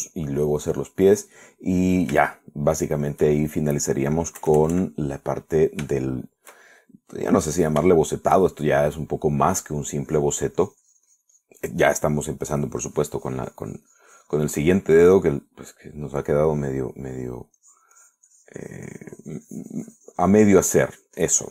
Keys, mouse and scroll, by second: 0.5 click, 2.0 click, 3.6 shift+middle click, 4.7 shift+middle click, 5.6 KP_Add, 7.2 shift+middle click, 7.9-9.0 shift+middle drag, 9.2 shift+middle click, 11.0-12.9 drag, 14.1-15.9 drag, 16.0 middle click, 18.8-21.5 drag.